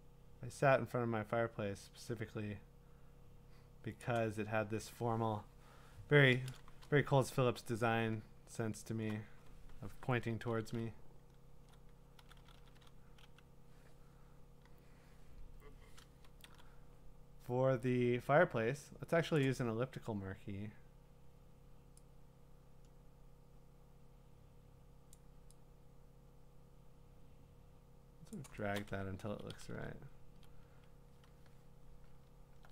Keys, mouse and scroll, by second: 4.0 click, 7.7 click, 7.9-8.9 scroll, 10.2-12.7 typing, 16.4 m, 19.3 click, 25.1 click, 29.3 Left, 29.5 Left, 29.7 Left, 30.3 Left, 32.3 scroll.